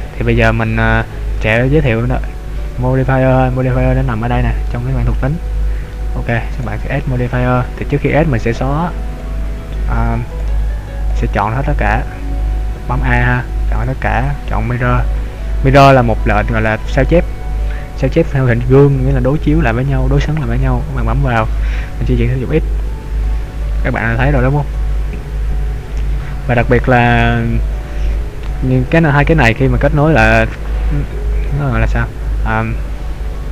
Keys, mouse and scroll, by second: 0.4 middle click, 4.7 middle click, 6.6 click, 10.3 click, 11.6 a, 12.1 a, 13.8 click, 22.8 click, 27.9 scroll down 1, 29.0 click.